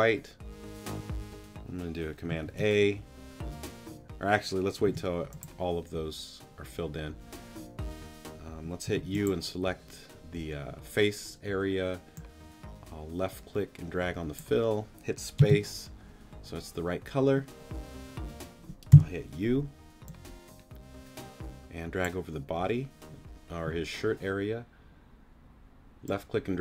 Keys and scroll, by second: 2.4 super+a, 4.9 t, 8.9 u, 15.4 space, 18.9 u.